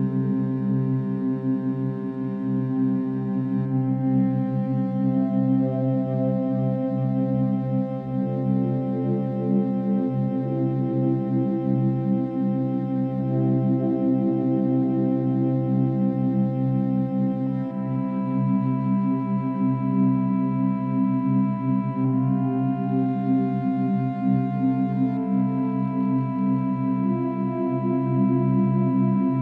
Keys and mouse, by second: 0.0 Escape, 1.5-2.0 drag, 4.7 click, 6.5 click, 7.7 ctrl+s, 8.7 click, 11.0 click, 12.1-13.0 drag, 13.2-14.4 drag, 14.6 Right, 15.2-19.1 typing, 20.0-20.9 drag, 21.1-22.0 drag, 22.5-23.4 drag, 23.7 click, 25.5 Escape, 26.5-27.5 drag, 28.5-29.4 drag.